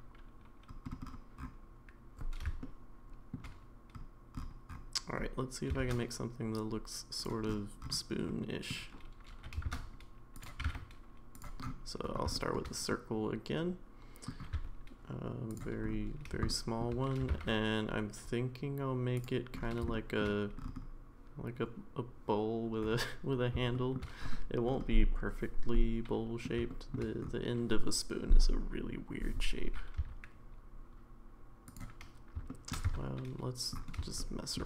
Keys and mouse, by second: 2.6-3.3 shift+middle drag, 5.8 shift+a, 8.3-8.7 middle drag, 9.3 g, 10.6 g, 12.3 shift+middle click, 12.9-14.3 middle drag, 16.3 shift+s, 16.5 shift+middle click, 17.2 g, 19.9 shift+middle click, 23.7 shift+middle click, 25.7 middle click, 26.7 shift+middle click, 30.0 s, 32.5 shift+middle click, 32.8 Tab, 34.2 middle click.